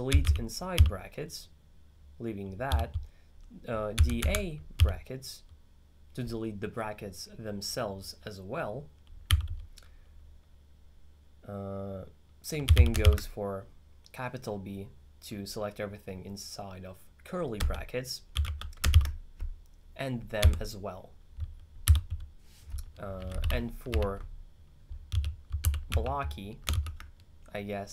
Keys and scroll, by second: 0.0-1.3 typing, 2.7 u, 4.0 d, 4.3 a, 4.8 b, 9.4 u, 12.5-13.6 typing, 19.0 shift+b, 20.5 d, 21.9 u, 23.5 ctrl+6, 24.9-26.8 typing.